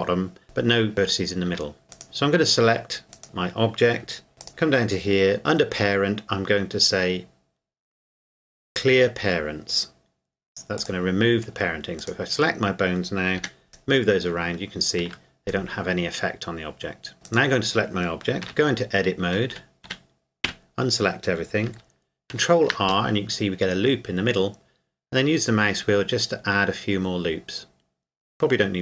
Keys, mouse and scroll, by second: 0.4 Escape, 1.5 Tab, 1.9 right click, 4.4 right click, 10.8 click, 12.0 right click, 13.4 g, 15.0 Escape, 17.3 right click, 18.4 Tab, 19.5 a, 19.9 a, 20.5 a, 22.3 ctrl+r, 25.3-26.0 scroll up 1.